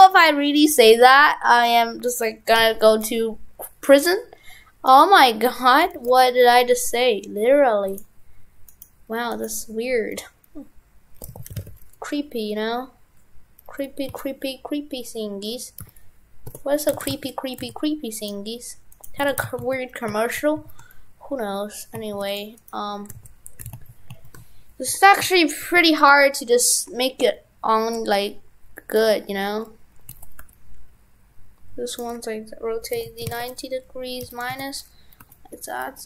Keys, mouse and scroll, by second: 8.7 right click, 16.9 shift+f, 18.3 right click, 19.2 shift+f, 22.6 right click, 23.2 shift+f.